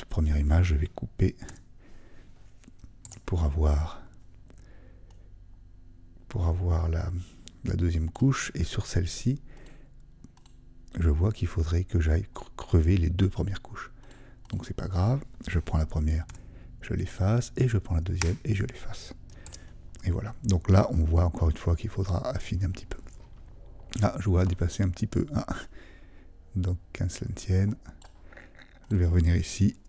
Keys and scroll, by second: 3.0 super+d, 19.4 super+d.